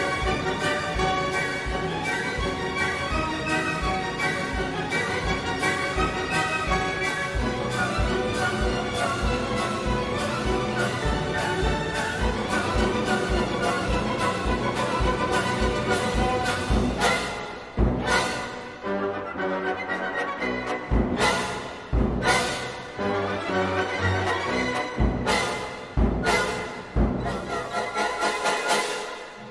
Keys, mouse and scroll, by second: 5.4 click, 10.4-13.6 drag, 13.9-15.6 drag, 26.5-28.3 drag, 29.1 click.